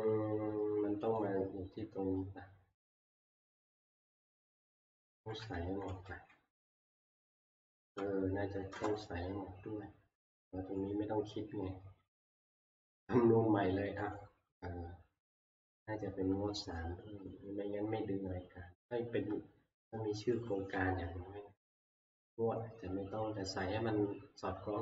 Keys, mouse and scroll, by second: 1.2 click, 3.9 click, 5.1 Right, 5.9 ctrl+c, 6.1 Down, 6.6-7.4 Down, 7.7 Down, 8.0 Up, 8.7-11.1 Return, 10.9-11.2 Down, 10.9 Up, 10.9 click, 11.2 Up, 14.1 click, 16.9-19.3 drag.